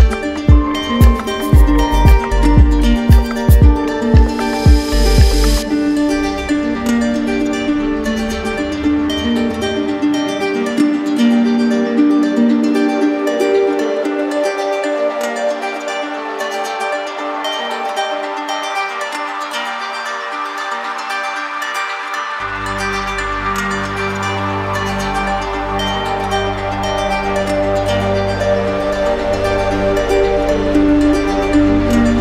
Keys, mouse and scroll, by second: 0.3 click, 1.0 right click, 2.0 alt+right click, 3.3 right click, 4.5 click, 5.3 click, 5.7 click, 6.4 click, 7.7 click, 8.0 click, 8.4 click, 9.0 click, 9.9 click, 11.0 right click, 11.7-13.3 alt+right drag, 13.5 z, 16.1-17.2 drag, 17.2-18.2 drag, 19.7 click, 22.2 click, 22.8 right click, 23.5 click, 24.3 click, 25.0 click, 25.5 click, 27.4 click, 28.3 click, 29.9 shift+click, 31.9 shift+click.